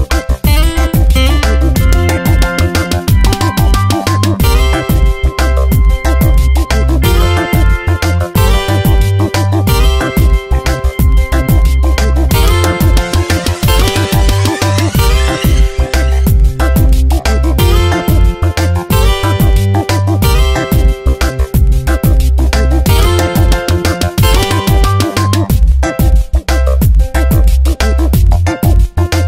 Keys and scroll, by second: 0.1 space, 5.8 space, 6.4 v, 6.7 Tab, 7.3 space, 10.3 ctrl+shift+], 14.0 v, 17.3 e, 20.2 ctrl+z, 21.4 ctrl+shift+n, 21.7 Return, 26.9 v.